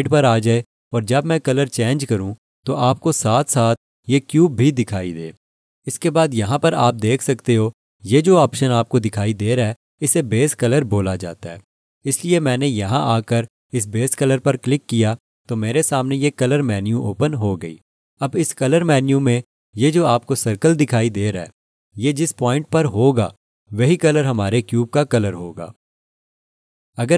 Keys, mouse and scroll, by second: 0.1 alt+click, 0.9 alt+shift+click, 2.3 alt+shift+click, 14.5 click.